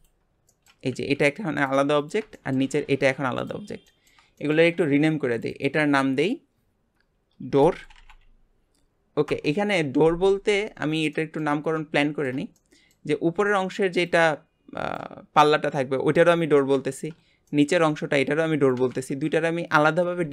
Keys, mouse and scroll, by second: 0.3 shift+scroll down 1, 0.5 shift+middle click, 1.0 g, 2.0 click, 2.3 shift+middle click, 2.8 g, 3.8-5.3 middle drag, 5.3 click, 5.5-7.9 drag, 7.9 o, 10.4-11.1 scroll down 2, 11.1 shift+middle click, 11.6-12.0 scroll down 1, 12.0-13.1 shift+middle drag, 13.1 scroll down 2, 13.4-16.8 shift+middle drag, 17.5-20.3 shift+middle drag.